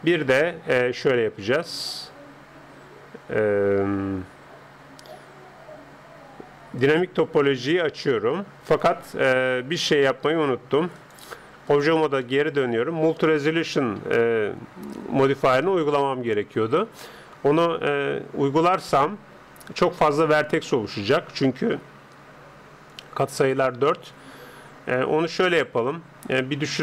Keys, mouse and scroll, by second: 0.9 Escape, 6.8-9.5 drag, 10.9-12.7 drag, 12.2-17.5 middle drag, 20.3 Tab, 20.9 Tab.